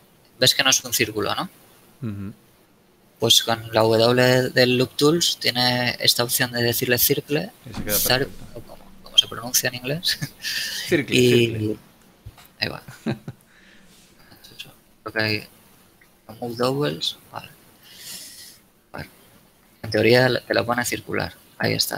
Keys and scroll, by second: 3.7 w, 12.6 ctrl+z, 14.7 a, 15.3 space, 19.6 w.